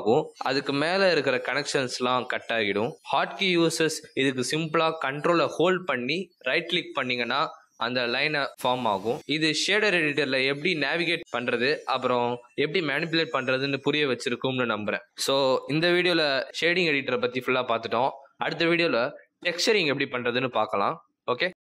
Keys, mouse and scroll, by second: 3.9 click, 5.5 click, 7.3 ctrl+right click.